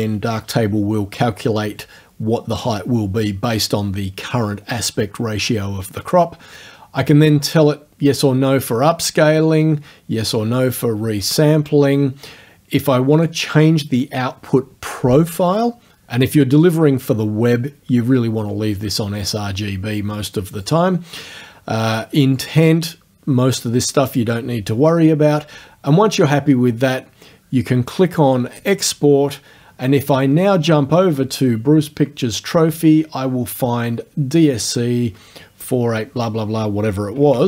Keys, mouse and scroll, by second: 7.4 click, 13.2 click, 20.7 click, 22.4 click, 24.1 click, 28.6 click, 37.4 alt+Tab.